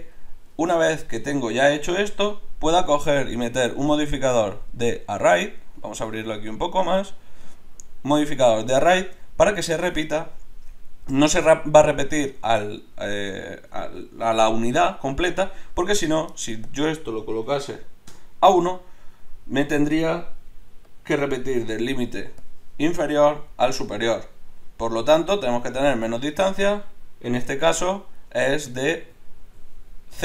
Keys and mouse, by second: 2.1 Tab, 4.4-5.5 drag, 6.0-8.9 drag, 16.6-20.0 drag, 20.6 d, 20.9-23.8 drag, 27.7 ctrl+z, 29.2 ctrl+z.